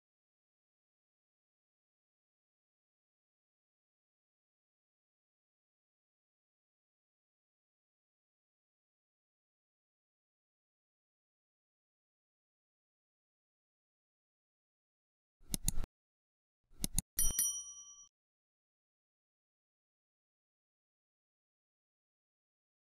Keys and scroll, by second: 8.7 Escape, 15.8 Escape.